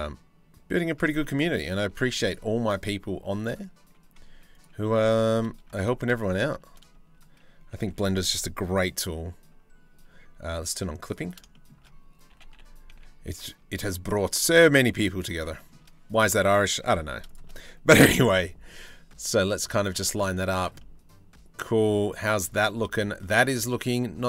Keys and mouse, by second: 0.8 shift+middle click, 1.7 ctrl+r, 4.1 click, 4.7 2, 4.9 click, 5.4 shift+middle click, 7.5 1, 11.1 shift+middle click, 11.9 g, 15.1 shift+middle click, 15.7 middle click, 16.8 shift+middle click, 17.7 g, 19.8 z, 20.4-22.1 drag, 22.5 shift+middle click, 22.9-24.2 middle drag.